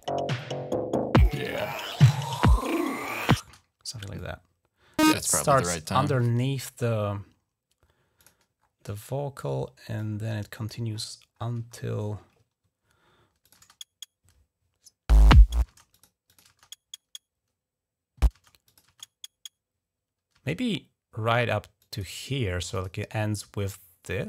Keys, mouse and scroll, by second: 0.2 click, 1.2 click, 2.1 click, 3.3 space, 4.0 click, 4.4-5.3 typing, 6.1-6.8 scroll up 2, 8.0 click, 8.4 scroll down 1, 9.8 click, 10.8-11.6 scroll up 3, 11.3-12.0 typing, 13.1-13.8 typing, 13.3 click, 15.5 space, 15.8 click, 16.1 click, 16.3 space, 18.2 space, 18.5 click, 18.7 space, 20.2 typing, 21.6 click, 22.6 click, 23.5-24.2 scroll down 8.